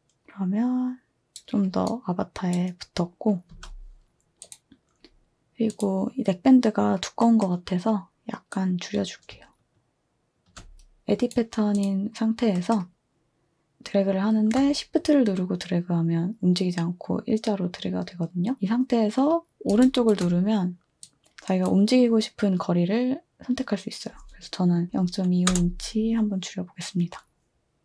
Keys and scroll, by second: 1.3-2.1 typing, 3.5 space, 24.9 typing, 25.5 Return.